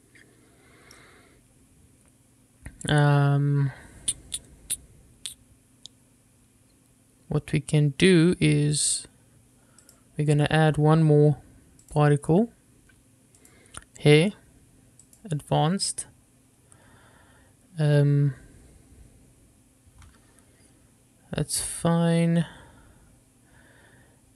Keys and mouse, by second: 0.2-1.2 middle drag, 9.0 drag, 13.6 click, 15.3 click.